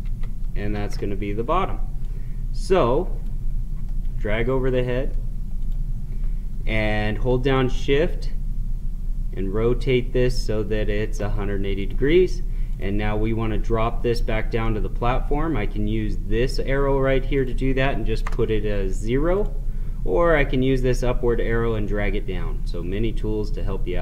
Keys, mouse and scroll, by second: 0.0 ctrl+c, 0.7 ctrl+v, 2.0-3.9 drag, 3.9-5.6 middle drag, 5.6 click, 7.3 Caps_Lock, 7.8 Caps_Lock, 11.7 click, 14.6-17.3 middle drag, 17.3 click, 23.1-24.0 drag.